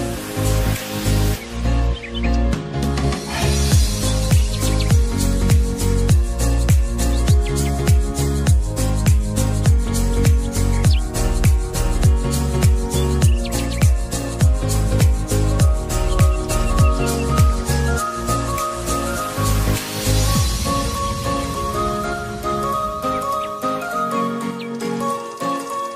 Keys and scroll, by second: 1.1 v, 5.3 ctrl+t.